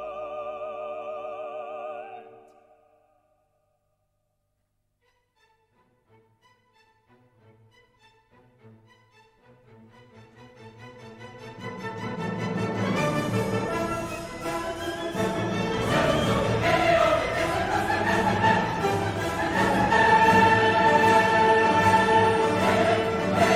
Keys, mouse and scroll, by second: 0.8 click, 1.8 click, 2.8 right click, 3.7 click, 4.4 click, 5.5 click, 7.3 click, 8.8 click, 10.2 right click, 11.3 click, 12.5 click, 13.7 click, 15.3 click, 16.1 right click, 17.0 click, 17.6 click, 18.6 click, 20.1 click, 21.9-23.2 drag, 23.5 right click.